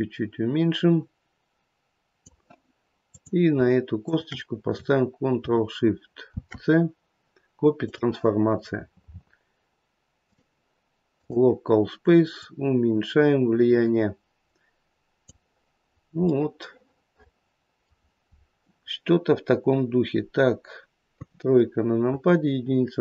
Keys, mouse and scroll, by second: 3.0 click, 4.0 shift+click, 6.2 ctrl+shift+c, 8.6-9.3 scroll down 12, 10.2 click, 12.3 click, 15.8-16.5 scroll down 2, 16.5 middle click, 21.1 KP_3, 22.0 KP_1.